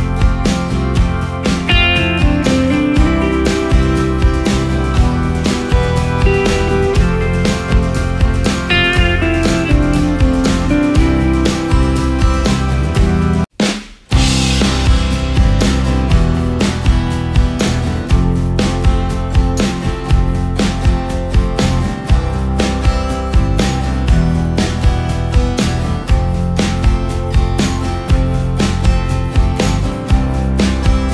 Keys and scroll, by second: 2.4 ctrl+space, 3.9 ctrl+i, 4.4 ctrl+space, 13.6 ctrl+alt+space, 14.8 ctrl+alt+space, 18.2 ctrl+space, 30.7 ctrl+space.